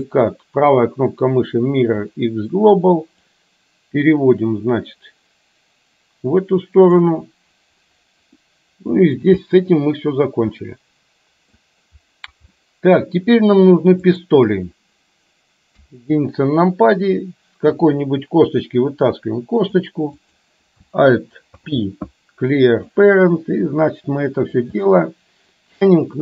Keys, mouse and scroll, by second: 2.1-3.4 right drag, 3.4-7.1 drag, 8.5 middle click, 8.5 scroll up 1, 10.6-11.6 middle drag, 12.6 middle click, 12.6 scroll up 1, 14.1 click, 15.7 KP_1, 17.9 e, 21.6 alt+p, 23.7 click, 24.9 scroll up 1, 25.0 middle click.